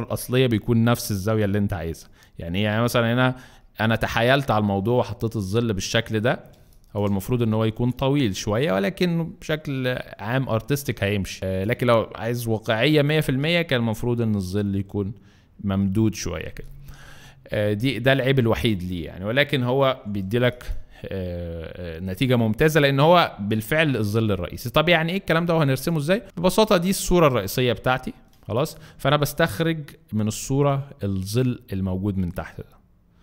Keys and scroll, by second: 6.5 alt+space, 7.3 alt+space, 11.4 space, 17.7 space, 18.9 alt+space, 20.2 alt+space, 28.3 alt+space.